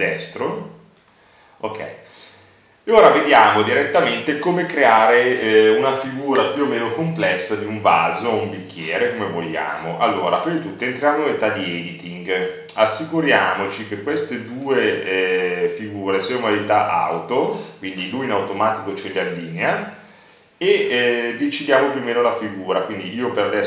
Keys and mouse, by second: 7.5 Tab, 13.6-18.4 drag, 20.0 click, 20.8 middle click, 21.5-23.2 drag, 23.2 middle click.